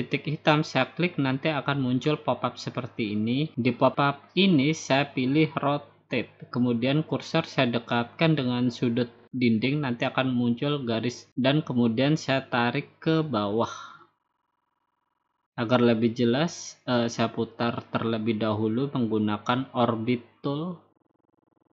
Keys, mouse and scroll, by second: 2.1-3.3 drag, 3.9-4.9 drag, 8.1-9.2 drag, 10.2 shift+click, 11.7 shift+click, 13.1 shift+click, 14.7 click, 16.5 click, 18.3 click, 19.6 click, 19.9-20.6 scroll down 4, 20.6 scroll down 2, 21.5 click.